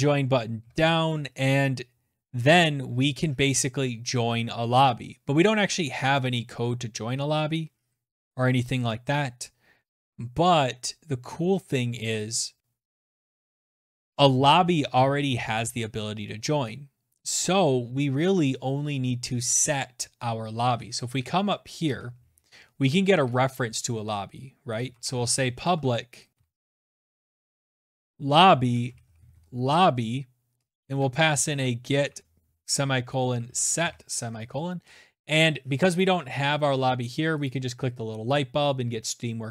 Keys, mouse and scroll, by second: 19.6 click, 20.4 Return, 21.7 Return, 23.0-32.8 typing, 33.8 click, 34.5 click, 35.9 click, 36.8 click.